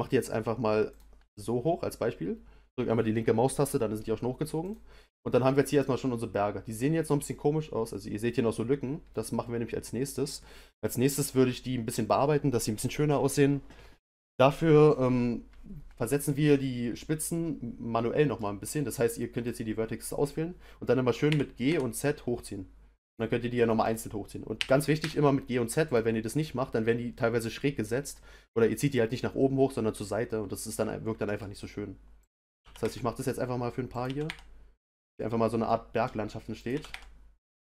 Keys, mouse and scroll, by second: 4.6 click, 5.5-8.5 middle drag, 9.1-12.2 middle drag, 16.3-19.4 middle drag, 19.4 click, 21.3 g, 23.8 click, 24.6 g, 30.3-32.2 middle drag, 32.2 click, 32.6 g, 33.9 click, 34.0 g, 35.6 middle click, 36.6 click, 36.7 g.